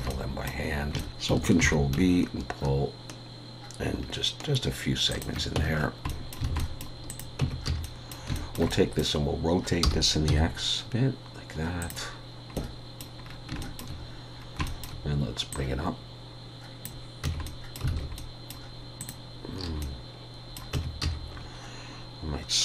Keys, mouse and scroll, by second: 0.1 middle click, 0.7-1.0 scroll up 2, 1.0 shift+middle click, 1.6 ctrl+b, 5.7-6.3 scroll down 5, 6.1 middle click, 6.5 alt+a, 6.6 middle click, 7.1 click, 7.4 Tab, 7.7 a, 7.8 middle click, 8.3 shift+middle click, 8.7 middle click, 9.8 r, 12.5 middle click, 13.2-13.6 scroll down 3, 13.6 shift+middle click, 14.3 scroll down 1, 14.7 shift+middle click, 15.5 click, 17.2 Tab, 17.4 middle click, 17.9 alt+a, 18.2 middle click, 19.0 click, 19.8 middle click, 20.7 Tab, 21.0 a.